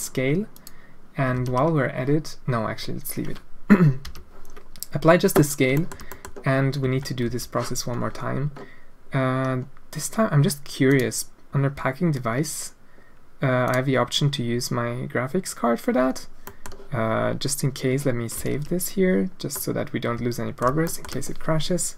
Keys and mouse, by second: 1.3 ctrl+a, 4.0 n, 5.7 shift+middle drag, 6.1 middle click, 6.8 Tab, 7.2 a, 13.6 click, 16.6 click, 18.3 ctrl+s, 19.5-20.6 drag, 20.8 shift+click.